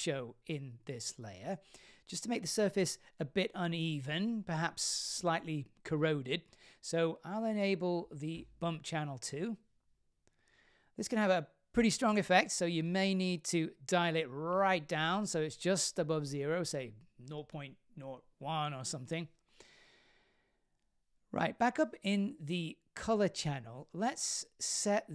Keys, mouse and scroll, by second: 0.4 click, 2.0 click, 3.7 click, 5.5 click, 6.7 scroll down 3, 7.3-8.4 scroll up 1, 8.4-8.8 scroll up 1, 9.1 click, 10.1 click, 12.3 click, 14.7 click, 15.6-19.2 drag, 20.2-21.3 drag, 20.7 KP_0, 21.9-22.2 scroll down 3, 22.4-23.9 middle drag.